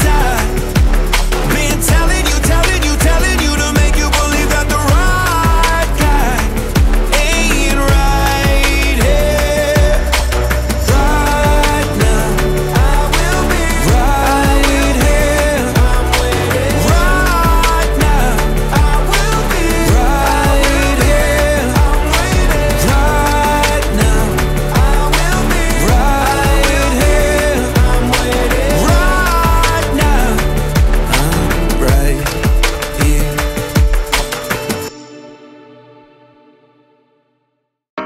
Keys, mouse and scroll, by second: 0.3 middle click, 1.2-3.7 drag, 3.7-4.2 scroll up 8, 4.2-6.5 middle drag, 6.5 click, 7.3-7.9 middle drag, 7.9 click, 9.1 click, 9.8 click, 11.9 click, 13.3-15.9 drag, 16.9-20.0 drag, 23.1 click, 24.2 click, 27.6-30.5 drag, 31.0 click, 31.5-32.3 middle drag, 32.3-32.8 scroll up 4, 32.8-33.2 scroll down 2, 33.2-35.2 middle drag, 35.2-38.0 drag.